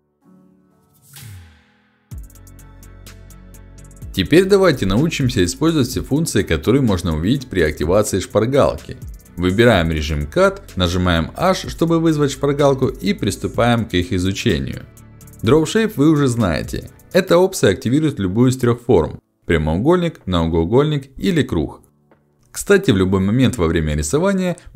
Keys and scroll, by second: 5.7 ctrl+alt+x, 6.4 ctrl+alt+x, 11.7 h, 19.3 1, 20.6 2, 21.9 3.